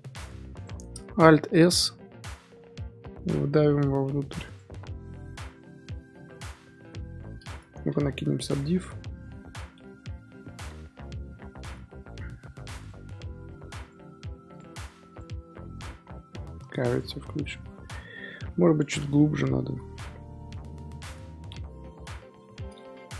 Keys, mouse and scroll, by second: 0.8 middle click, 1.6 alt+s, 4.7 Tab, 5.2-7.9 middle drag, 7.9 ctrl+2, 8.7 z, 9.1 z, 9.4-9.7 middle drag, 9.7 Tab, 10.2 middle click, 10.7 Tab, 10.9-11.2 middle drag, 11.2 z, 11.7 z, 12.8-15.8 drag, 17.3-18.6 middle drag, 18.6-19.1 ctrl+z, 19.6 ctrl+z, 20.6 middle click, 21.4 alt+e, 22.2 ctrl+z.